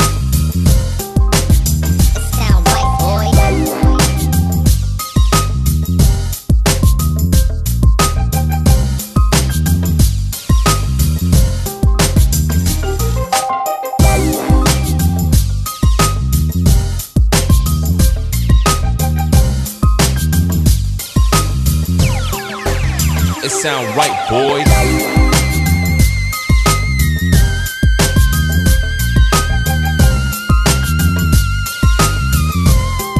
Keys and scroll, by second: 0.3 Escape, 1.3 l, 1.7 shift+w, 2.1 Escape, 4.5 l, 5.7 l, 6.1 shift+w, 6.5 Escape, 9.3 l, 9.7 shift+w, 10.0 Escape, 17.0 a, 18.2 3, 18.7 m, 19.8 2.